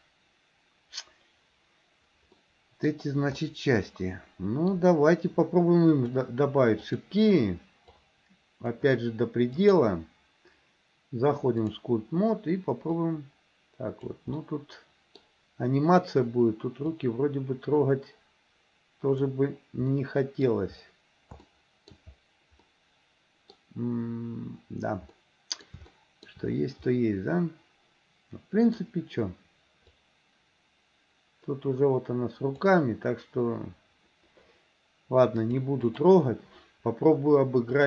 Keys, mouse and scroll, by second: 2.4-2.9 middle drag, 3.4-4.8 middle drag, 6.8 click, 8.0-8.8 drag, 9.6-11.9 drag, 13.0-14.2 drag, 14.4 middle click, 17.0-19.3 drag, 20.0 middle click, 21.5 shift+middle click, 22.7 middle click, 25.2 middle click, 25.9 shift+middle click, 27.0-28.8 middle drag, 30.0-32.7 drag, 35.5 click.